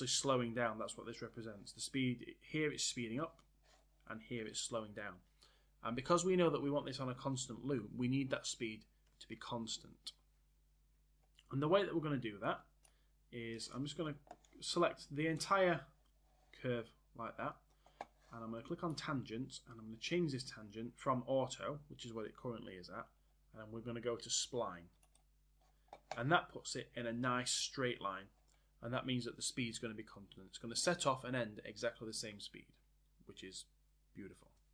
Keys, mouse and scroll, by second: 12.8 click, 14.7 click.